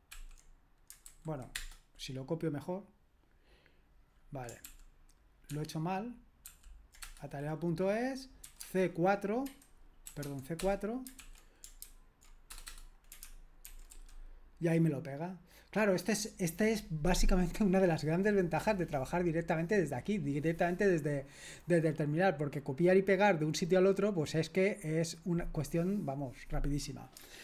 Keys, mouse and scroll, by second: 0.1 super+l, 1.1 super+h, 1.5 Return, 4.7 ctrl+p, 5.5 ctrl+p, 6.5 ctrl+p, 7.0 Return, 8.6-10.2 typing, 10.6 Return, 11.2 super+l, 12.5 Return, 12.7 Return, 13.2-13.9 typing, 13.7 ctrl+alt+v.